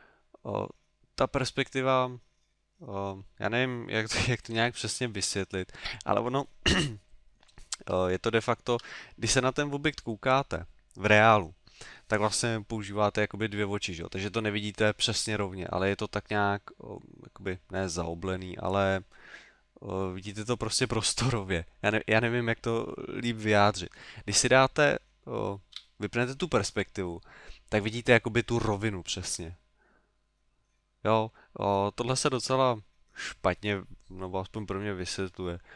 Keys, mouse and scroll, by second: 4.6 KP_3, 8.0 shift+middle click, 25.7 KP_5.